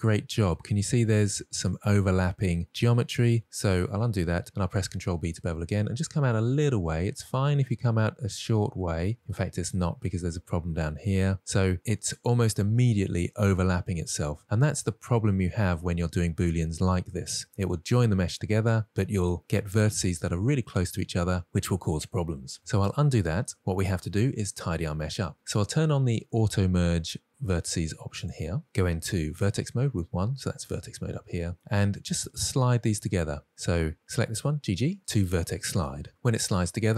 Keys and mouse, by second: 2.1-2.5 drag, 3.0 middle click, 9.4 shift+click, 9.7 middle click, 15.6 middle click, 20.9 middle click, 23.5 ctrl+z, 23.8 ctrl+z, 27.9 click, 29.7 1, 31.6 middle click, 32.0 shift+middle click, 32.7 middle click, 33.7-35.0 drag, 35.0 g, 35.0 g, 36.1 middle click.